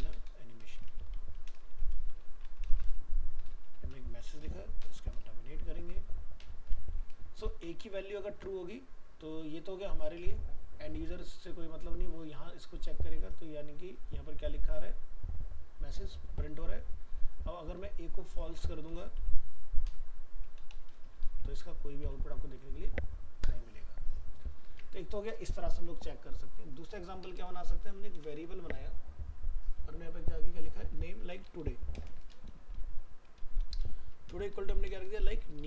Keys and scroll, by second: 8.2 ctrl+s, 21.6 ctrl+s, 22.1 alt+Tab.